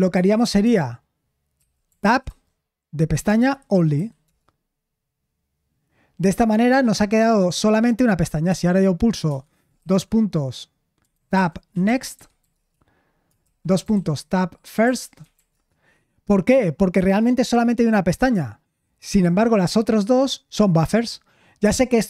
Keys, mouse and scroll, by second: 1.3-2.7 typing, 3.9 typing, 4.2 Return, 9.1 ;, 9.2 Escape, 9.8 shift+;, 11.6-15.8 typing.